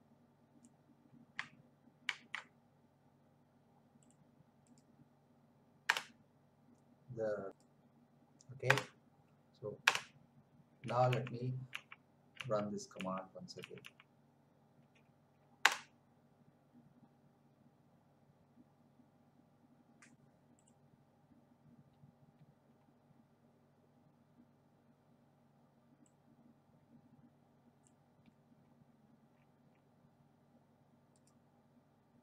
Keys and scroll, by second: 2.0 ctrl+c, 5.8 Return, 8.6 Return, 9.8 Return, 10.8 Up, 15.6 Return.